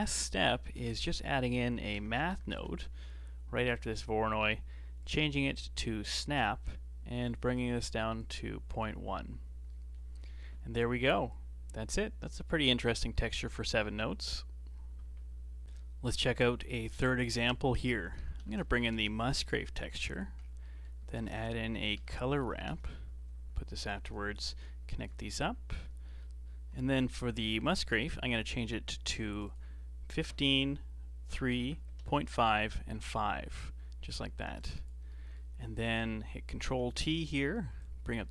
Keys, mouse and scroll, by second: 0.1-0.4 scroll up 3, 1.0 shift+a, 4.2 middle click, 5.0-9.3 drag, 9.3-9.6 scroll down 3, 9.6 middle click, 10.1-11.3 scroll up 6, 11.3-13.1 drag, 13.1-13.7 middle drag, 13.7-14.9 scroll down 10, 16.0 middle click, 17.0 shift+a, 20.3 scroll up 3, 20.6-21.0 middle drag, 21.0 shift+a, 22.5 r, 24.1-25.7 alt+right drag, 25.7-26.0 scroll up 5, 26.0-29.0 middle drag, 29.0 click, 29.4-32.4 drag, 34.6-35.0 drag, 35.0 middle click, 35.5 scroll down 4, 36.7 ctrl+t, 36.8-37.7 middle drag, 37.7 drag.